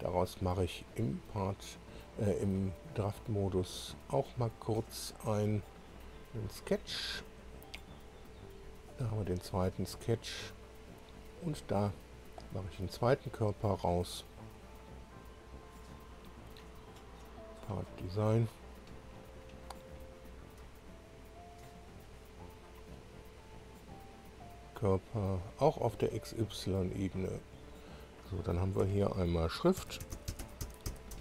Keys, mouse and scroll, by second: 1.2 click, 3.5 click, 5.9 click, 8.1-8.7 scroll down 4, 12.8 click, 17.2 click, 18.2 click, 21.0 click, 22.1-22.4 scroll down 2, 22.6 click, 24.0 click, 25.4 click, 26.1 click, 27.7 click, 28.8 F2, 29.5-31.2 typing.